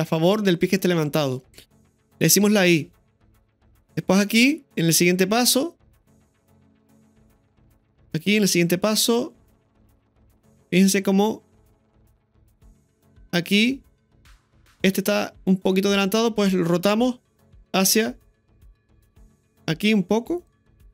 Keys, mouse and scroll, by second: 4.0-14.7 drag.